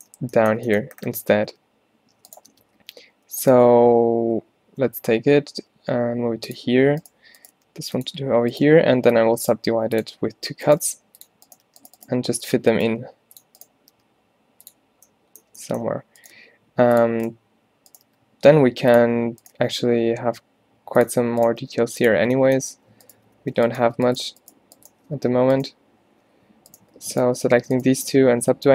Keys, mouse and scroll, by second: 1.6 g, 2.6 shift+Tab, 2.8 g, 5.1 g, 7.1-9.1 drag, 7.6 g, 9.1 alt+w, 10.0 click, 10.9-14.0 typing, 16.4 g, 18.1 g, 19.6 g, 21.7 g, 23.4 alt+w, 25.2 z, 27.6 alt+w, 28.0 z, 28.5 g.